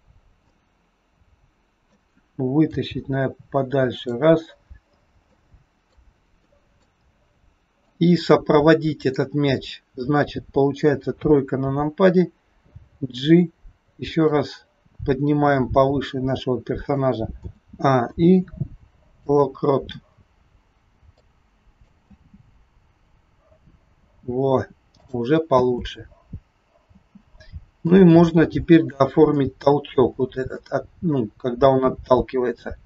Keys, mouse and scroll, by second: 0.5 middle click, 2.7 g, 4.4-5.2 scroll down 4, 5.2 middle click, 6.4 middle click, 7.0 scroll down 2, 7.7 click, 11.1 KP_3, 12.6 g, 18.0 a, 18.0 i, 21.2 click, 22.1 space, 24.2 space, 25.0 click, 25.5 space, 27.0 space, 27.9 click, 29.4 shift+middle click, 30.1 scroll up 6, 30.5 shift+middle click, 31.4-31.7 scroll down 2, 32.6 click.